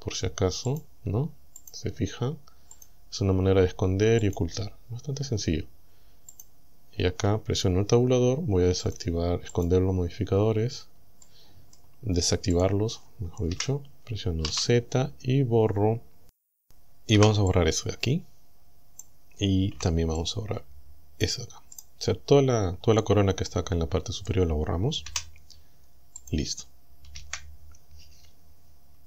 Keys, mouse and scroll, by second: 0.7 click, 1.6 click, 2.8 click, 4.3 click, 6.4 click, 8.9 click, 9.6 click, 10.7 Tab, 11.2 middle click, 11.8 scroll down 1, 12.6 click, 13.6 KP_1, 14.5 z, 15.2 scroll up 1, 17.2 b, 17.6-19.2 drag, 19.8 b, 20.2-21.4 drag, 21.8 right click, 23.5 middle click, 24.4 scroll down 1, 25.1 Delete, 26.2 click, 27.2 KP_1.